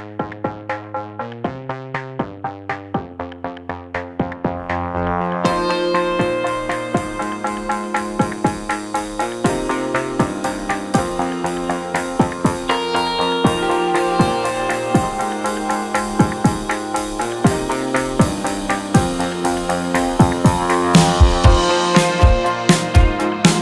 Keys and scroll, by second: 10.6 space, 10.8 F2, 13.2 ctrl+q.